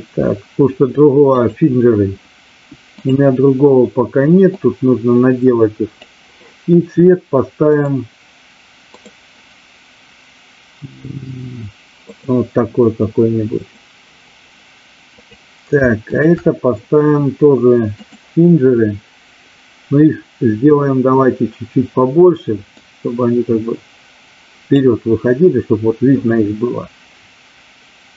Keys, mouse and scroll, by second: 4.4-6.0 drag, 8.9-12.2 drag, 15.2 click, 16.0 shift+click, 18.0 click, 22.8-24.8 drag.